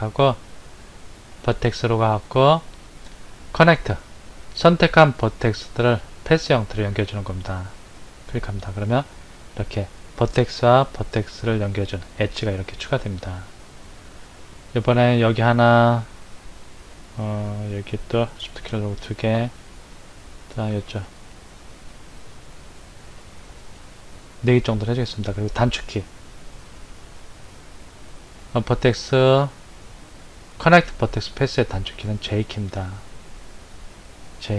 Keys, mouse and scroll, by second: 1.3-4.5 drag, 14.9 click, 18.6 shift+click, 21.0 shift+click, 23.5 shift+click, 28.4-31.5 drag, 34.3 j.